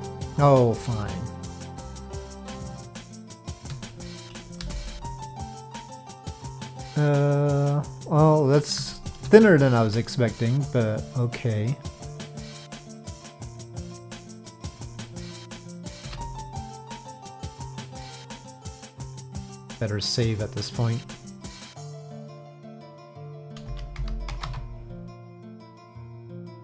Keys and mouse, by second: 1.3 shift+click, 2.2 middle click, 2.9 shift+click, 4.6 Delete, 5.7-8.6 middle drag, 8.9 shift+middle click, 10.0-12.4 middle drag, 14.2 middle click, 16.0 KP_Divide, 17.5 middle click, 17.9 click, 18.5 middle click, 19.9 click.